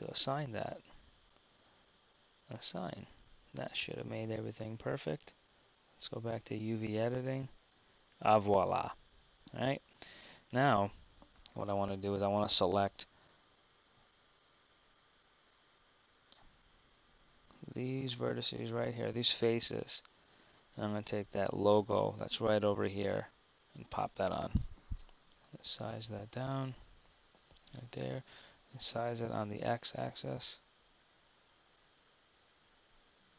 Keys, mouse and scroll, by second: 7.7 Tab, 10.4 Tab, 25.3 s.